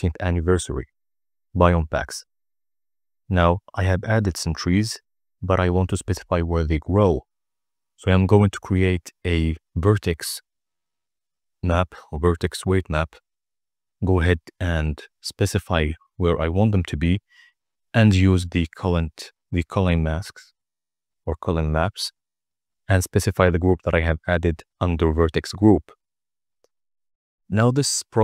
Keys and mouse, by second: 1.4 ctrl+a, 5.9-7.7 drag, 11.4 click, 12.8 click, 14.1 click, 15.0 KP_0, 16.1 z, 21.5 click, 24.2 click, 24.9 click, 25.7 n, 27.6 middle click, 27.9 click.